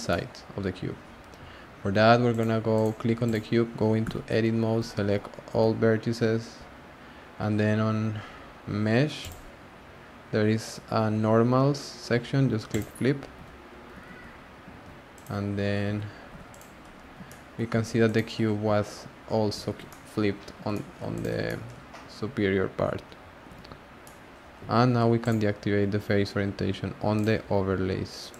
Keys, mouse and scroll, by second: 2.3 click, 2.7 click, 3.2 click, 4.0 Tab, 4.8 1, 5.5 a, 9.2-12.3 drag, 13.3 Tab, 14.0 alt+z, 14.7 alt+z, 15.1 click, 15.8 Tab, 16.3 Tab, 16.5 click, 16.9 scroll down 4, 17.2-17.7 shift+middle drag, 17.7 Tab, 18.0 click, 18.3 scroll up 1, 18.6 Tab, 19.6 alt+z, 19.9-20.4 middle drag, 20.4-20.7 scroll up 2, 20.7-21.1 shift+middle drag, 21.1 click, 21.3 scroll down 2, 21.4-23.5 middle drag, 23.5 alt+z, 24.0-25.2 middle drag, 25.2-28.3 drag.